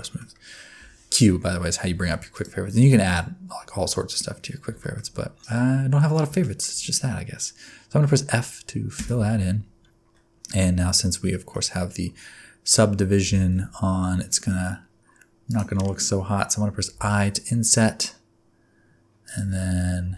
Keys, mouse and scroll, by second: 0.0 shift+middle click, 0.8 Tab, 1.9 1, 2.3 alt+click, 3.5 alt+click, 4.8 shift+middle click, 6.4 shift+middle click, 9.0 f, 10.4 middle click, 11.7 scroll up 1, 12.3-13.2 scroll up 3, 13.2 g, 19.2 i, 19.4 alt+z, 20.0 alt+z.